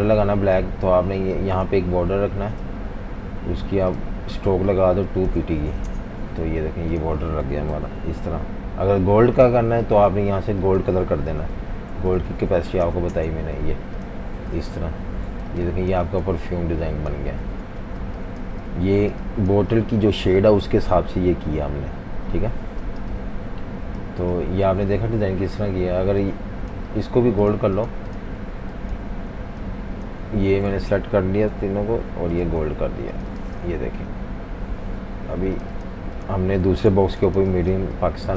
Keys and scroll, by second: 0.0-0.2 typing, 5.7 2, 5.9 Return, 6.8 v, 7.2 v, 7.4 v, 7.8 super+-, 7.9 super+-, 8.1 super+-, 11.0-14.2 typing, 14.7 super+-, 14.8 super+-, 15.5-19.6 typing, 20.7 super+-, 20.9 super+-, 22.0 super+-, 22.9-27.6 typing, 29.1 super+3, 30.2 super+3, 30.8 alt+super+3, 31.5 i, 32.6 v, 33.7 super+-, 33.9 super+-, 34.0 super+-, 36.7 super+c, 37.5-38.3 typing.